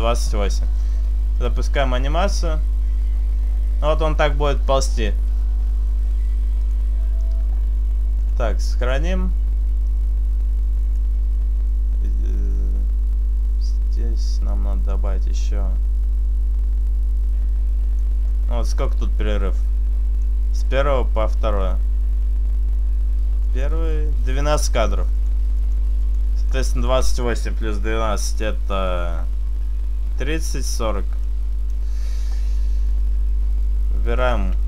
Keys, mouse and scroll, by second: 1.5 click, 7.2 click, 11.0 click, 18.3 click, 23.5 click, 25.2 click, 26.1 click, 31.3 click.